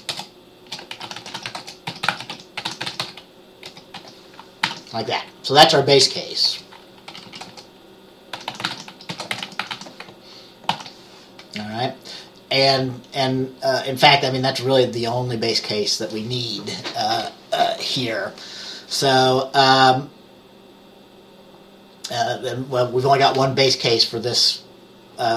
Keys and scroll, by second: 0.0-4.1 typing, 4.8 ctrl+s, 5.9-11.3 typing.